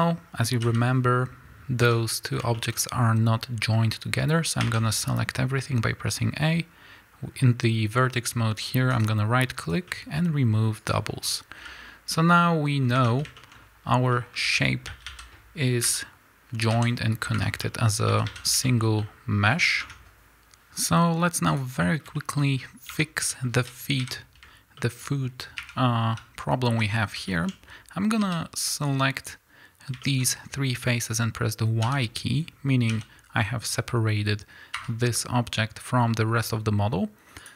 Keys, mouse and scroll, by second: 0.5 g, 1.8 Escape, 2.7-4.6 scroll up 2, 4.6 a, 10.8-12.3 right drag, 12.0 z, 12.3-13.5 middle drag, 12.9 Tab, 14.0 scroll down 1, 14.0 middle click, 14.4 Tab, 14.8 a, 15.8 l, 16.6 g, 17.3 Escape, 17.5 middle click, 18.0 a, 18.3 scroll down 1, 18.6-20.5 shift+middle drag, 19.7 Tab, 21.5 click, 21.8-25.0 middle drag, 22.6-22.9 scroll up 2, 22.9 Tab, 24.0 KP_1, 25.0-25.6 scroll up 3, 25.6 3, 26.0 scroll up 1, 26.2 z, 27.3 shift+middle click, 28.3 b, 30.0 shift+middle click, 30.2 scroll up 1, 31.9 y, 32.9 g, 34.8 Escape, 35.1-37.4 middle drag, 36.4-37.4 scroll down 2, 37.4 drag.